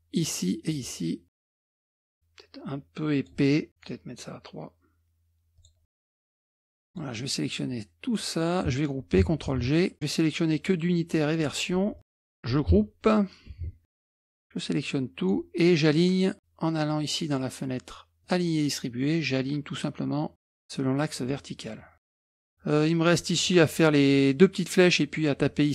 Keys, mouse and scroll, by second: 0.2-1.2 drag, 1.6 click, 1.8 click, 4.1-5.3 right drag, 5.6 click, 6.1 KP_Subtract, 6.2-6.7 scroll down 1, 6.4 KP_Subtract, 6.9-8.5 drag, 9.5 ctrl+g, 10.5-11.7 drag, 12.0 click, 13.5 ctrl+g, 14.4-15.6 drag, 18.2 click, 22.3 KP_Subtract, 22.4 middle click, 22.8-25.7 middle drag.